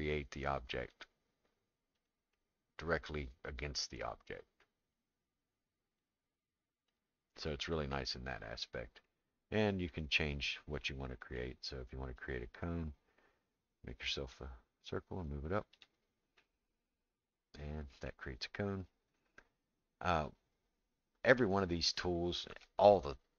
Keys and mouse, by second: 0.0-2.1 drag, 2.3-4.3 middle drag, 5.0-7.0 drag, 7.4-9.1 middle drag, 9.9-11.4 drag, 12.2-15.8 drag, 16.4-18.1 middle drag.